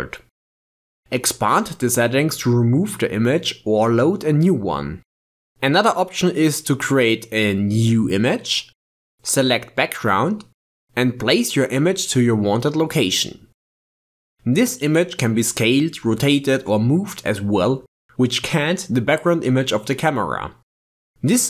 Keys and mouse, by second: 1.4 click, 4.8 click, 7.9 shift+a, 14.8 click, 15.3 s, 18.6 g.